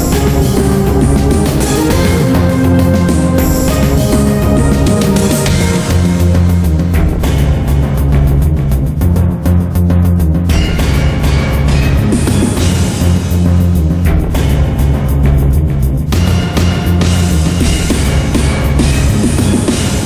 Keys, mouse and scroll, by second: 1.5 middle click, 2.1 scroll down 1, 2.3 middle click, 2.8 shift+middle click, 6.5-12.2 drag, 12.3 middle click, 13.0 Tab, 13.5 middle click, 15.7-20.0 drag.